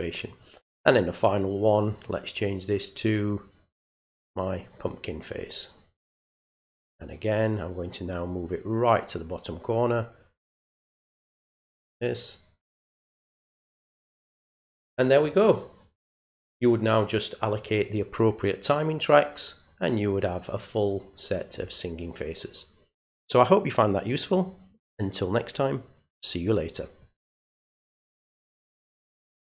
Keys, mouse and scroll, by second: 1.9 click, 4.6 click, 6.3-8.9 drag, 10.0-13.0 drag, 29.5 click.